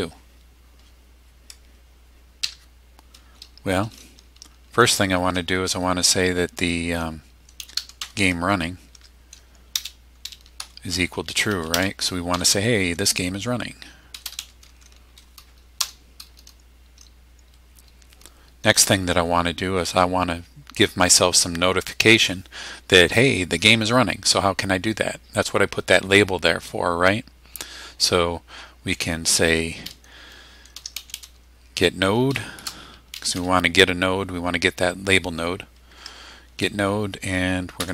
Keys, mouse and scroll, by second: 2.4 Tab, 7.3-8.5 typing, 8.9 Tab, 9.7 space, 10.6 =, 11.7 space, 12.3 t, 13.9-14.9 typing, 15.8 Return, 30.5-33.8 typing, 36.0 Tab, 37.8 Down.